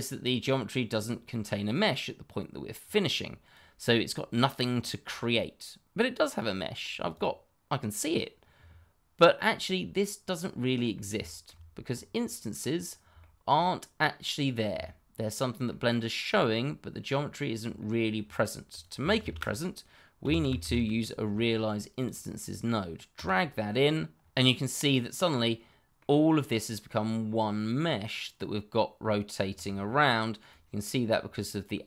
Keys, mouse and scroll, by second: 2.8 click, 7.0 middle click, 8.8 click, 9.5-10.2 scroll up 1, 10.2 middle click, 11.2 shift+middle click, 11.3 middle click, 11.4 shift+middle click, 11.8-13.0 scroll up 1, 13.1 shift+middle click, 13.2 middle click, 13.3 shift+middle click, 14.0 scroll down 1, 14.8 shift+middle click, 17.7 shift+middle click, 17.8 middle click, 17.9 shift+middle click, 18.7 click, 19.2-20.7 typing, 21.9 click, 23.1 click, 25.4 middle click, 29.9 shift+middle click, 30.0 middle click, 30.1 shift+middle click, 31.1-31.8 scroll up 1.